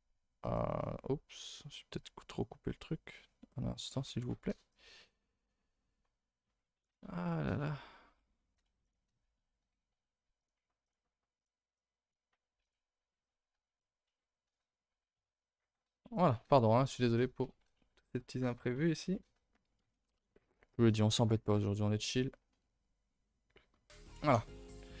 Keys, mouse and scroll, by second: 21.2-22.2 middle drag, 22.2-25.0 scroll up 1.